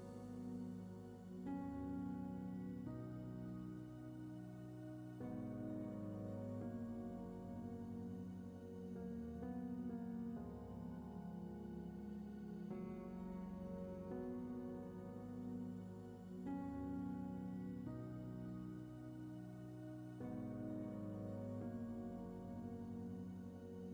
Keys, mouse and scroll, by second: 0.0 middle click, 0.6-1.6 drag, 1.7-10.6 middle drag, 10.6 alt+click, 10.9 ctrl+r, 13.6 ctrl+r, 14.3 click, 14.3 s, 14.8 click, 15.8 3, 16.0 click, 16.2-20.0 middle drag, 16.4 e, 18.4 e, 20.0 click, 20.1 middle click, 20.7 shift+click, 21.2-23.8 typing, 22.1 click, 22.4 shift+middle click, 22.9 click, 23.6-23.9 middle drag.